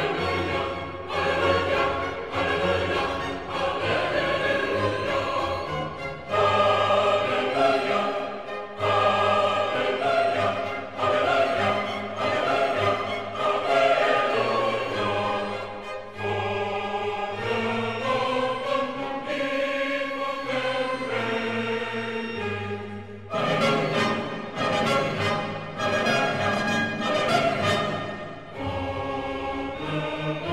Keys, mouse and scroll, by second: 0.7-3.0 middle drag, 3.0-3.7 typing, 14.4 click, 15.3 middle click, 15.4-23.0 middle drag, 23.0 click, 24.6-30.5 middle drag.